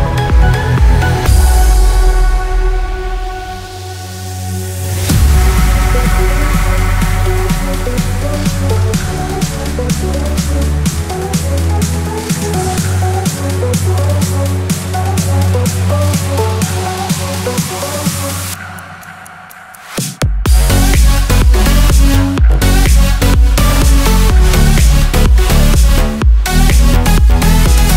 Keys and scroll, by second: 8.5 ctrl+z, 25.1 ctrl+j.